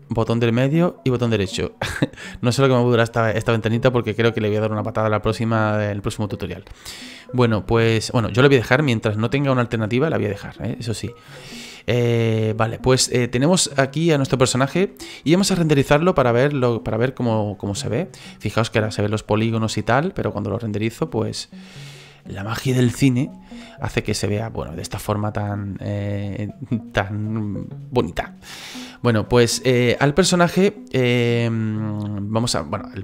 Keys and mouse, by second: 0.0 middle click, 0.8 right click, 5.9 middle click, 6.9 middle click, 7.6 shift+middle click, 12.5 middle click, 13.3 shift+middle click, 13.8 shift+middle click, 14.9 middle click, 17.7 click, 20.2 click, 20.6 click, 21.0 click.